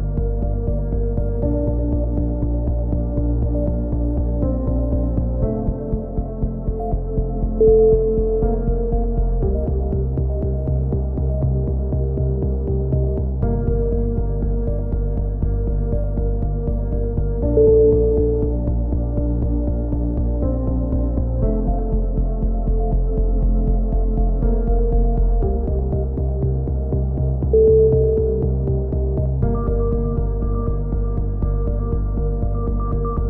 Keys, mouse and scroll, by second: 1.9 ctrl+l, 2.6 t, 4.3-6.3 drag, 6.3 middle click, 11.7 t, 12.1 middle click, 12.4 c, 13.4 click, 13.8 a, 13.8 b, 16.2-17.2 middle drag, 16.4 b, 18.4 b, 19.9 x, 20.8 z, 21.2-22.3 drag, 24.1-25.1 drag, 25.3 ctrl+l, 26.2 ctrl+KP_7, 26.7 z, 28.3 middle click, 29.1 s, 31.7-32.8 drag.